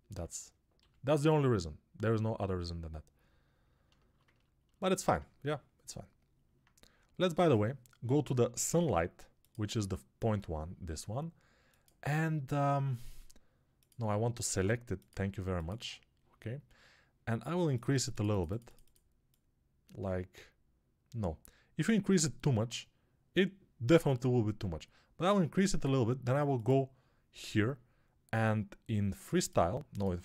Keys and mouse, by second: 0.6 g, 14.3 ctrl+Tab, 15.5-30.2 drag.